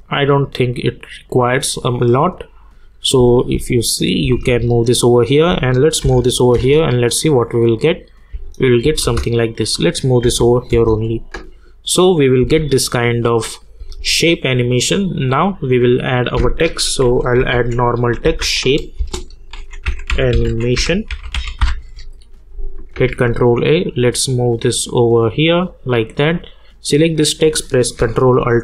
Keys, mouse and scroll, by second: 2.7 click, 3.2 space, 6.0 [, 6.5 space, 9.4 click, 10.2 [, 10.7 space, 13.3 click, 13.8 space, 14.9 click, 16.8-22.1 typing, 18.9 Return, 23.0 ctrl+a, 24.3-25.4 drag.